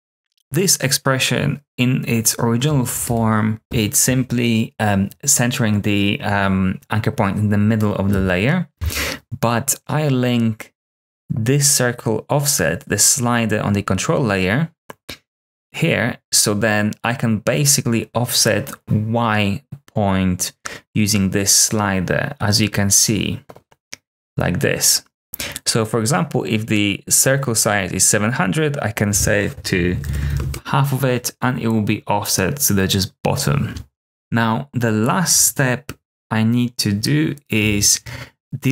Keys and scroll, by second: 0.2 0, 3.0 Return, 29.6-30.7 typing, 34.0 Return, 34.0 typing, 37.5 r.